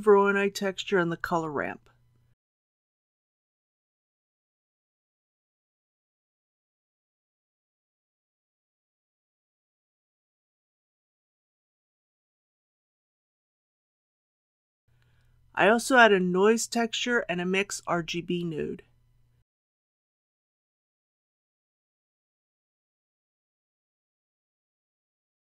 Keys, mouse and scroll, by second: 1.4 shift+d, 5.0 g, 6.6-15.2 drag, 15.8 shift+a, 20.1-21.2 drag.